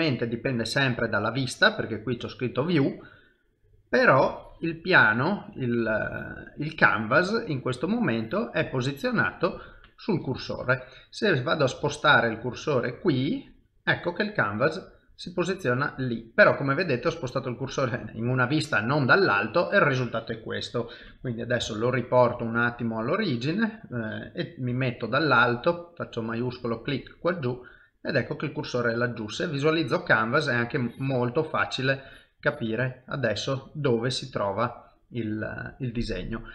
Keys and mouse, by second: 2.8 middle click, 4.2 click, 4.9 middle click, 5.9 click, 9.6 click, 9.6 middle click, 11.9 shift+middle click, 13.2 shift+right click, 13.8 middle click, 18.0 middle click, 21.6 shift+s, 22.4 shift+s, 24.7 KP_7, 26.1 shift+right click, 27.0 middle click, 30.8 click, 32.9 middle click.